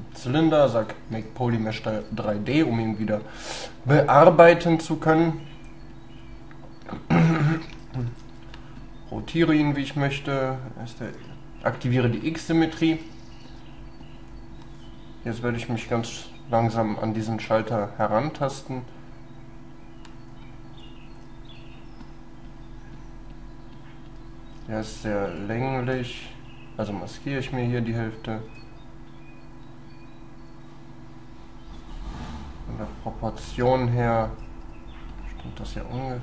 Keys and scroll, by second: 11.2 x.